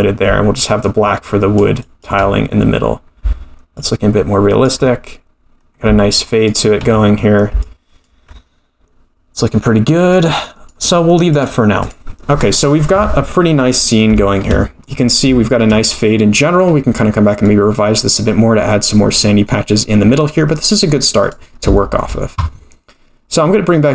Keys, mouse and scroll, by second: 0.6 ctrl+click, 1.8 ctrl+click, 3.7 ctrl+click, 6.1 ctrl+click, 7.6 ctrl+click, 10.1 click, 11.3-11.9 drag, 13.2-13.7 scroll down 3, 13.7-14.1 scroll up 2, 14.1 shift+middle click, 15.3 shift+middle click, 15.9 middle click, 17.0-18.3 scroll up 3, 17.4 middle click, 20.0-20.5 scroll down 4, 20.5 middle click, 21.2 click, 21.7-22.0 shift+scroll up 1, 22.0 shift+middle click.